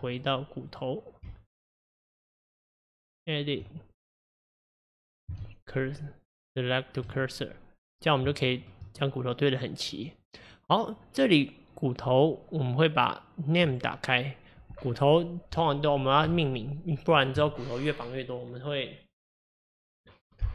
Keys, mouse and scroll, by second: 0.2 click, 0.7 click, 1.3 Tab, 4.1 click, 5.5 shift+s, 8.4-11.4 shift+middle drag, 13.7 click, 16.3 F2.